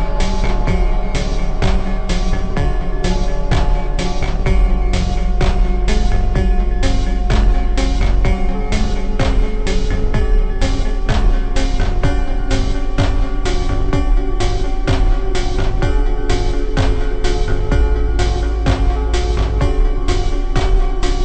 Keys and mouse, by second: 0.0 e, 1.6-2.7 drag, 2.7 g, 4.0 e, 7.1 e, 8.4-9.9 drag, 9.1 e, 14.6-19.9 drag, 19.9 g.